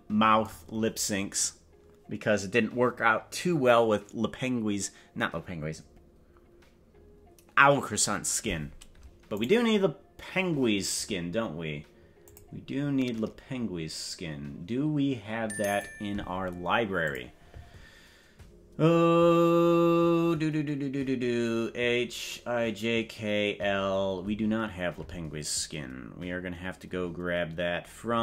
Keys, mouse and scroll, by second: 9.4 right click, 12.2 click, 15.6 click.